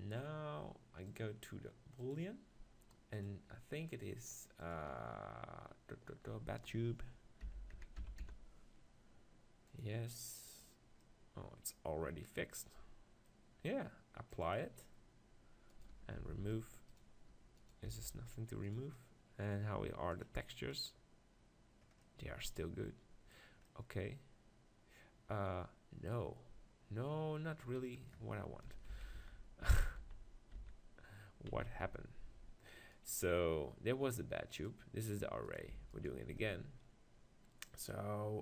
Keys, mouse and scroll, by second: 2.7-7.7 drag, 11.0-13.4 middle drag, 13.4-15.7 drag, 16.2-19.5 drag, 16.2 g, 17.9 g, 20.3 click, 20.3-21.3 right drag, 21.3 click, 22.1-25.5 middle drag, 29.4 ctrl+z, 30.0 ctrl+z, 30.7 ctrl+z, 31.3 ctrl+z, 32.0 ctrl+z, 32.9-38.4 right drag.